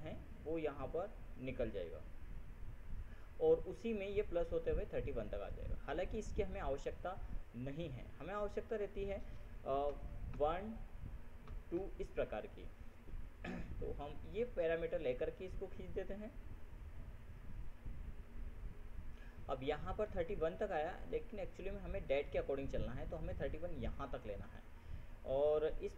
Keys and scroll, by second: 10.2 ctrl+1, 10.7 ctrl+Tab, 11.8 ctrl+2, 12.1 ctrl+Tab.